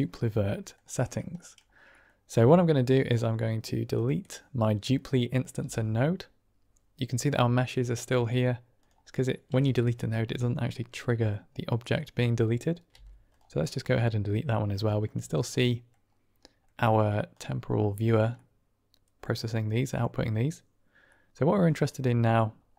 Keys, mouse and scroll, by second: 0.4 click, 1.3 click, 1.9 click, 5.5 typing, 11.2 click, 11.3 middle click, 12.8-13.3 typing, 13.8-14.6 drag, 14.8 shift+click, 15.3-15.8 middle drag, 16.3 middle drag, 17.3 click, 18.3-19.1 middle drag, 19.6 middle drag, 21.1 middle click, 21.7 click.